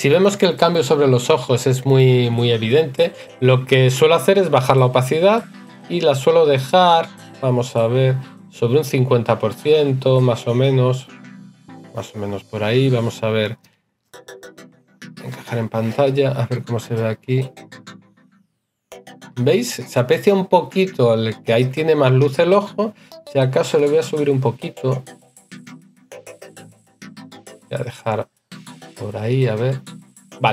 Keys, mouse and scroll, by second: 13.2 right click.